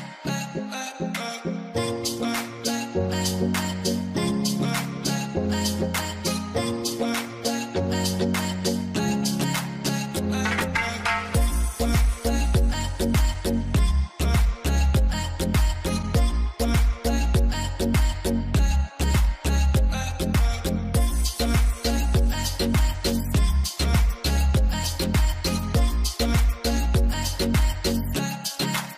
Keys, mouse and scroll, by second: 3.2 3, 3.5 Return, 5.2-6.0 typing, 8.1 5, 8.4 0, 8.9 Return, 12.4 Return, 12.9 1, 13.6 2, 13.7 Return, 15.8 Return, 17.4-21.1 typing, 17.4 Return, 22.6 double click, 23.2 2, 24.0 4, 24.5 5, 26.1-28.1 typing, 28.2 Return.